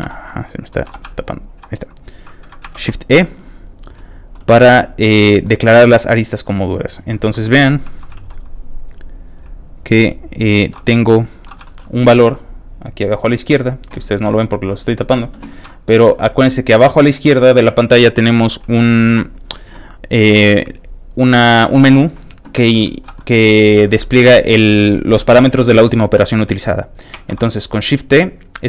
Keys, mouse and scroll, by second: 0.1 middle click, 0.8 b, 1.2 shift+click, 2.7 shift+e, 3.7 shift+click, 3.7 e, 3.9 shift+middle click, 4.7 shift+middle click, 5.8 shift+middle click, 6.5 click, 6.8 shift+click, 7.1 shift+middle click, 7.2 shift+middle click, 7.4 shift+middle click, 8.1 shift+e, 9.1 shift+click, 9.1 e, 9.6 shift+click, 10.1 click, 10.6 shift+e, 11.1 click, 11.4 middle click, 11.6 shift+middle click, 13.0 shift+click, 15.6 shift+middle click, 22.8 shift+middle click, 23.2 shift+middle click, 24.0 shift+middle click, 25.3 shift+middle click, 27.1 shift+e.